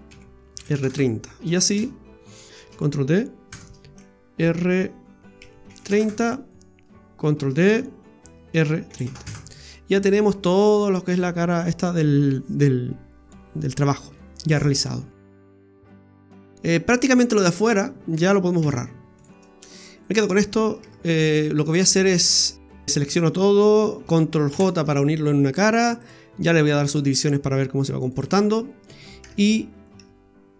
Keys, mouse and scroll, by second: 1.7 shift+d, 2.5 right click, 2.6 shift+d, 5.4 r, 7.4 shift+d, 8.5 r, 11.1 scroll down 1, 11.3-11.7 scroll up 5, 13.3 scroll down 1, 13.5 scroll up 2, 13.8-14.7 scroll down 6, 17.7 right click, 18.6 x, 19.6 scroll up 3, 20.0 right click, 20.8 Tab, 21.3 scroll down 2, 21.6 Tab, 22.6 a, 24.5 ctrl+j, 26.0 click, 28.1 click, 28.6-29.2 scroll up 1, 29.2 Tab, 30.0 Tab.